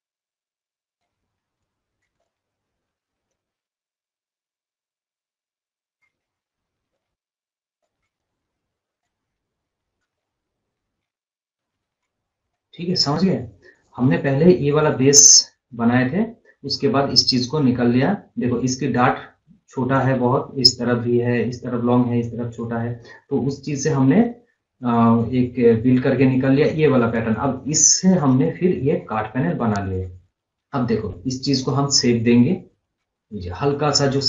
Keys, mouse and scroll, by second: 11.9 scroll up 1, 12.0 scroll, 12.3 scroll down 1, 12.4 scroll up 1, 12.6 scroll, 12.9 scroll up 1, 13.6 scroll down 1, 13.8 scroll, 13.8 scroll up 1, 15.0-15.3 scroll down 1, 15.5 scroll down 1, 16.1 scroll up 1, 22.7 scroll up 1, 23.6 scroll up 1, 26.8 click, 27.4 scroll up 1, 27.7 scroll down 1, 28.1 scroll up 1, 28.5 scroll down 1, 30.0 scroll, 31.6 click.